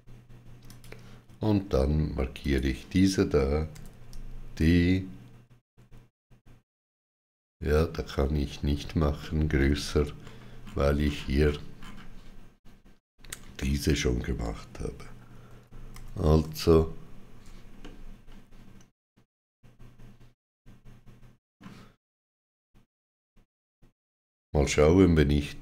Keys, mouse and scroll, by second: 0.5 shift+click, 2.2 click, 3.6 d, 9.0 middle click, 10.0-10.4 scroll up 2, 14.2-14.7 scroll up 8, 15.3 ctrl+z, 17.6 middle click, 24.8 ctrl+z, 24.8 middle click.